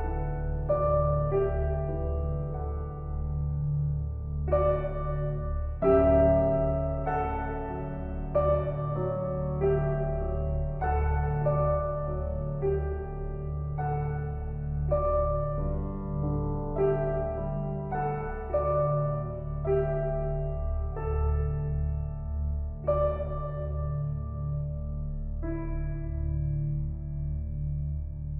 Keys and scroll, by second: 3.5 ctrl+g, 17.4 ctrl+-, 20.1 ctrl+t.